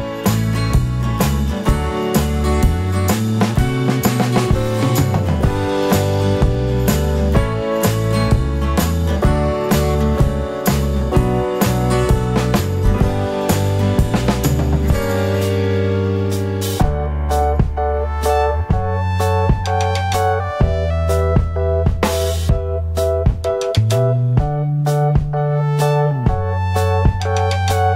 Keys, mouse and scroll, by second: 2.4 middle click, 2.8 F3, 2.8 middle click, 4.8 middle click, 5.0 F3, 6.0 F3, 7.2 ctrl+click, 11.1 middle click, 11.8 middle click, 11.8 F3, 14.3 middle click, 15.4 ctrl+click, 18.3 middle click, 19.6 scroll down 1, 20.2 scroll down 1, 21.0 alt+middle click, 23.4 scroll up 1, 24.5 scroll down 1, 27.2 ctrl+F3.